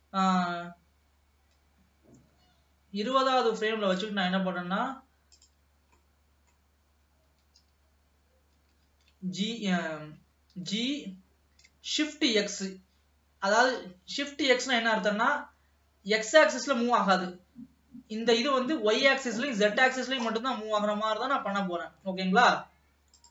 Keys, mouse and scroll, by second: 0.4-3.2 drag, 4.4-5.5 middle drag, 5.5 click, 6.2-7.5 middle drag, 7.5 g, 10.7 g, 14.3 scroll down 2, 14.6-23.3 middle drag.